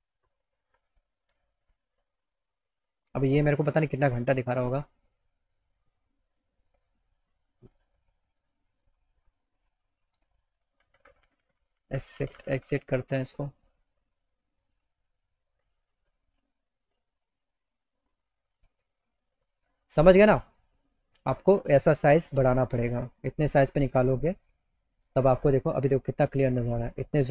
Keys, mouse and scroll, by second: 0.2 click, 3.4 click, 8.1 right click, 8.7-9.7 right drag, 10.5 Escape, 18.0 click, 19.6 click, 23.7 middle click, 26.8 middle click.